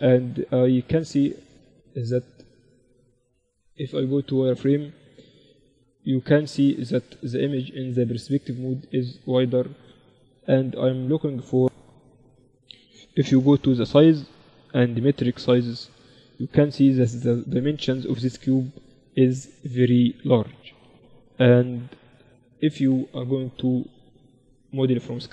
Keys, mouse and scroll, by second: 2.2 z, 13.2 n, 14.8-18.4 drag.